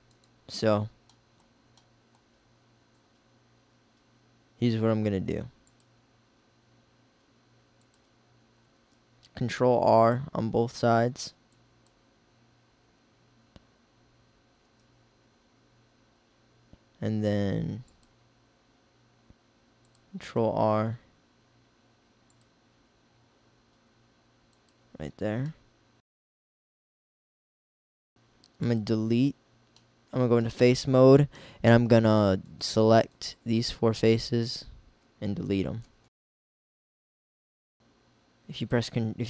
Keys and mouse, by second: 4.7 ctrl+r, 8.9 ctrl+r, 14.7 ctrl+r, 20.3 ctrl+r, 24.7 click, 35.9 x, 36.2 x.